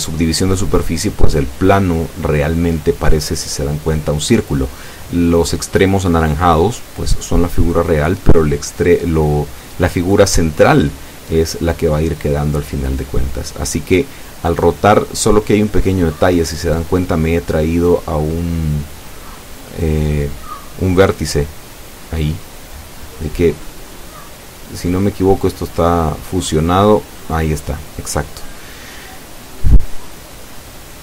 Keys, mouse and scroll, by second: 0.9-4.4 drag, 6.9 click, 19.6 r, 20.1 x, 20.4 KP_9, 20.5 KP_0, 20.8 KP_Enter, 22.5-23.5 drag, 23.7-25.1 middle drag, 25.4 scroll down 2, 26.1-30.4 shift+middle drag, 30.5 ctrl+click, 30.7 ctrl+z.